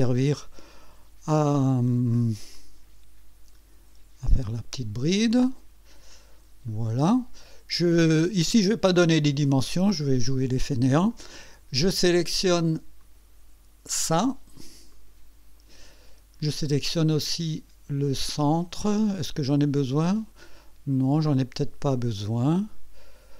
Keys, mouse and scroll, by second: 2.6 click, 6.7 click, 7.4 right click, 13.0 click, 14.9 click.